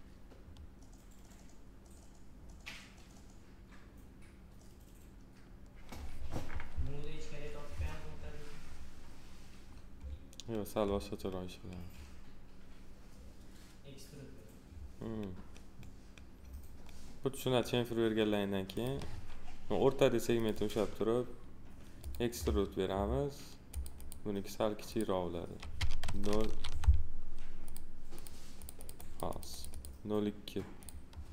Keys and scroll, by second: 26.5 ctrl+z.